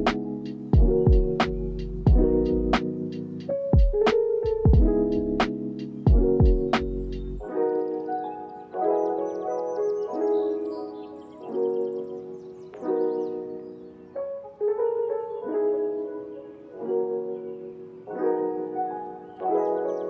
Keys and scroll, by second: 1.8 Delete, 3.7 alt+z, 5.3 ctrl+s, 6.9 =, 10.4 ctrl+s, 11.3 space.